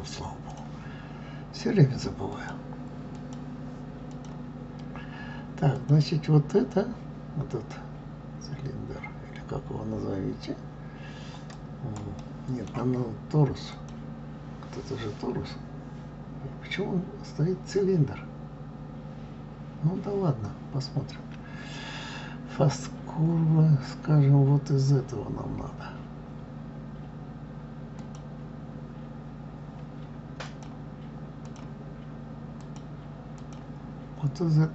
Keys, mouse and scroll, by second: 0.0-0.5 scroll down 1, 0.5 click, 2.3-4.2 drag, 5.7 click, 11.5 click, 12.2-13.7 middle drag, 13.7 click, 22.7 click, 28.0-31.0 drag, 32.6 click, 33.4 click.